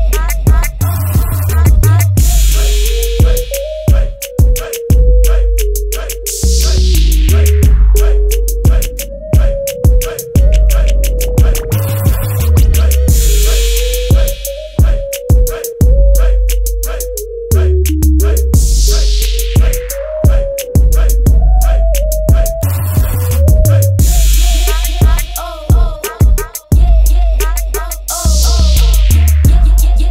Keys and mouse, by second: 18.7 KP_0, 20.8-24.1 middle drag.